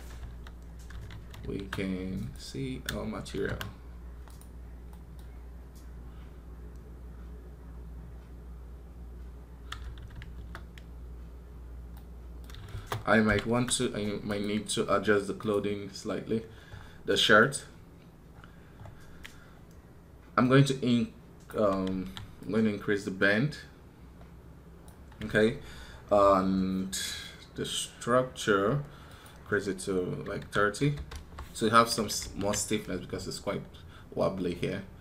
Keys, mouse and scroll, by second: 14.1 right click.